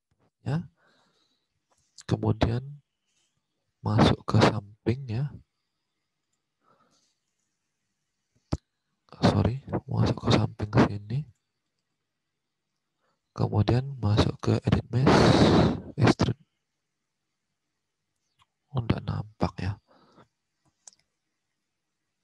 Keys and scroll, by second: 9.3 space, 20.9 space.